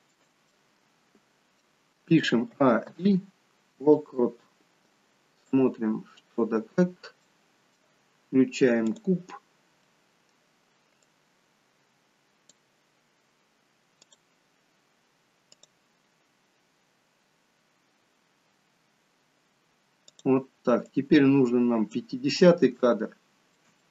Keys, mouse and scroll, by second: 0.6 middle click, 2.5 a, 2.9 i, 5.5 click, 6.7-8.5 scroll down 6, 7.2 middle click, 8.9 click, 9.9 middle click, 11.1 click, 20.3 click, 21.9 click, 22.8 shift+middle click, 23.8 middle click.